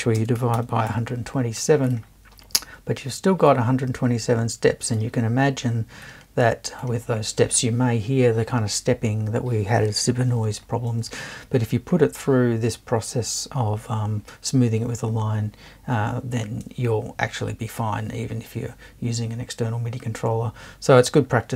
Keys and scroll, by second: 0.2-1.4 typing.